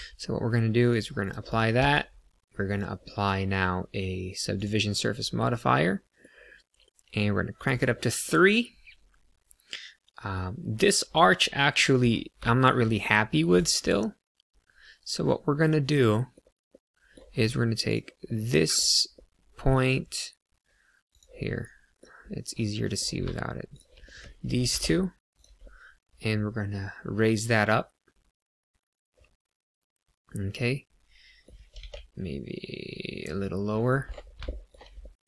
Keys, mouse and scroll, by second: 0.9 click, 1.5 click, 1.8 Tab, 2.6 click, 5.5 middle click, 7.5 click, 7.7 click, 8.4 middle click, 11.0 middle click, 12.3 shift+middle click, 13.0 middle click, 13.5 click, 13.8 middle click, 16.7 middle click, 17.9 click, 18.3 middle click, 19.1 middle click, 21.0 click, 21.5 middle click, 22.2 middle click, 23.7 shift+click, 24.0 middle click, 24.5 g, 24.6 z, 25.3 click, 25.5 middle click, 31.7 g, 31.8 z, 33.3 click, 33.7 middle click, 34.1-34.5 scroll up 3, 34.5 shift+middle click, 35.0 middle click.